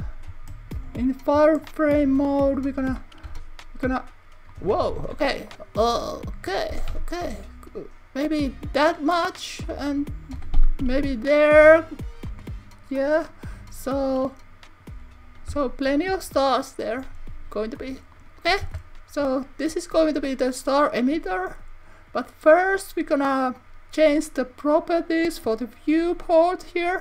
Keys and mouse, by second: 2.0-3.4 middle drag, 3.3 y, 4.5 click, 5.0 super+z, 5.7 click, 6.7 g, 7.0 y, 8.8 click, 9.2 click, 10.6 y, 12.3 click, 13.3-14.9 drag, 16.5 click, 17.0 s, 17.8 click, 18.2 click, 18.7 Tab, 20.0 Tab, 24.7 click.